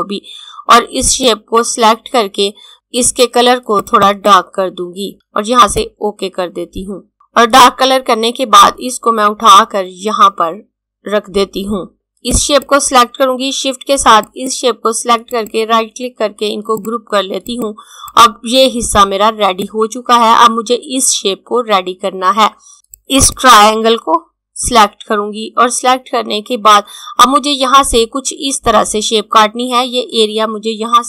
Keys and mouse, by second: 0.6 click, 3.8 click, 15.3 right click, 16.6 click, 22.7 click.